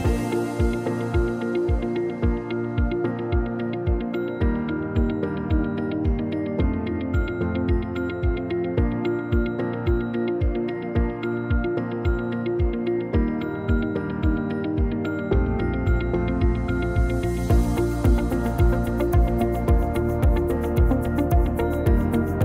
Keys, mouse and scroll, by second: 0.5 click, 1.6 ctrl+z, 1.9 middle click, 3.3 click, 4.0 ctrl+z, 4.2 middle click, 4.7 c, 5.0 m, 6.6 middle click, 7.6 click, 8.5 click, 8.8 shift+middle click, 9.5 scroll up 1, 11.5 scroll up 1, 12.0-12.5 scroll down 1, 12.5-14.6 scroll up 1, 15.7 Tab, 16.2 Tab, 17.6 Tab, 18.8 scroll down 1, 19.0 middle click, 20.8 click, 21.2 click, 21.6 click.